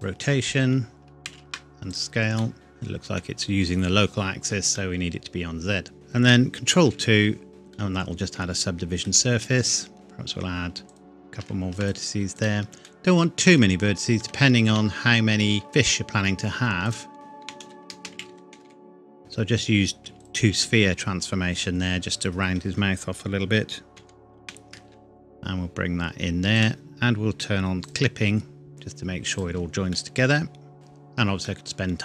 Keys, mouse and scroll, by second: 1.3 ctrl+a, 1.9 click, 2.4 middle click, 6.8 ctrl+2, 7.7 middle click, 9.1 Tab, 9.9 ctrl+click, 10.9 click, 11.4 ctrl+r, 11.8 ctrl+click, 12.4 click, 12.9 middle click, 13.8-14.2 scroll up 1, 14.2 Tab, 15.7 scroll up 1, 16.9 alt+click, 17.1 F3, 17.4-18.6 typing, 19.2 click, 23.9 g, 24.4 y, 26.5 shift+click, 28.7 y, 29.3 click, 29.5 Tab, 29.9 middle click, 30.1 middle click, 30.5 scroll up 1, 30.7 scroll down 1, 31.5 middle click.